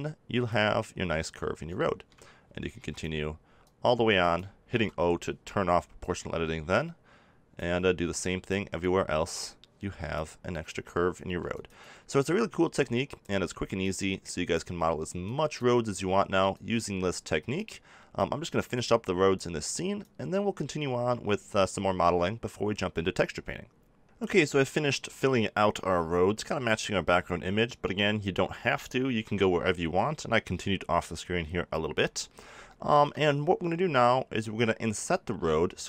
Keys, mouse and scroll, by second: 1.7 middle click, 2.7 e, 3.6-5.5 right drag, 4.6 o, 5.9-7.8 right drag, 8.1-11.2 right drag, 11.2 e, 11.7-19.3 right drag, 18.6 e, 19.3 click, 19.9-21.2 right drag, 21.2 middle click, 29.1 KP_7, 32.7 middle click.